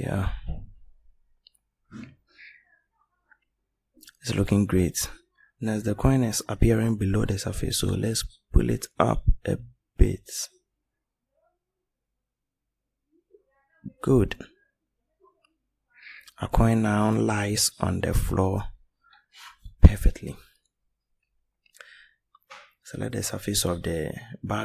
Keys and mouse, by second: 0.9-4.4 middle drag, 4.4-4.9 right drag, 4.9-6.0 middle drag, 7.7 middle click, 8.6-9.8 drag, 11.3 click, 15.2-17.1 middle drag, 20.4-23.5 middle drag.